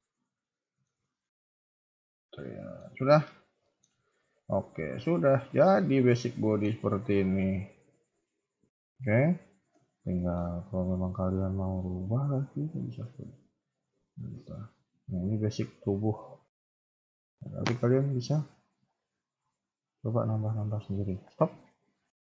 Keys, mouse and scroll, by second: 1.6 Tab, 1.6 middle click, 2.0 scroll up 1, 2.2 middle click, 2.8 KP_1, 3.0-3.5 scroll down 10, 3.6 shift+middle click, 3.9 scroll up 2, 4.4 Tab, 4.7 scroll down 1, 5.2 ctrl+s, 5.4 scroll up 2, 5.5 KP_3, 5.9-6.4 scroll down 2, 6.1 middle click, 6.9 KP_1, 7.1 KP_3, 7.6 KP_1, 7.9 scroll down 2, 8.7 ctrl+s, 8.7 scroll down 2, 9.0-9.7 scroll up 3, 9.3 click, 9.7 Tab, 10.1 shift+middle click, 10.6 z, 11.2 b, 12.3 g, 13.9 KP_3, 14.5 scroll up 2, 14.7 Tab, 15.1 z, 15.9 KP_1, 16.2 scroll down 4, 16.3 a, 17.0 ctrl+s, 17.0 a.